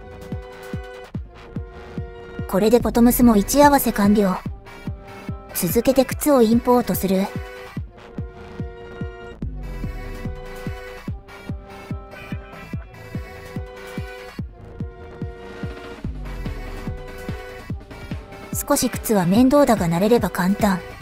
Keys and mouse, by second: 1.1 middle click, 1.7 middle click, 2.8 KP_1, 4.4 shift+click, 9.6 click, 19.3 click, 20.8 Delete.